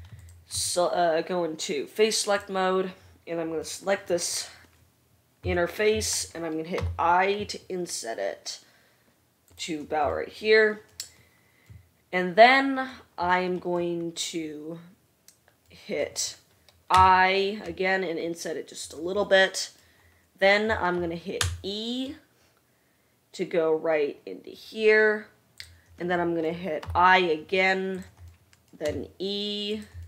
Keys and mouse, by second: 0.9 3, 3.1-9.8 right drag, 7.0 i, 17.2 i, 21.6 e, 27.1 i, 29.0 e.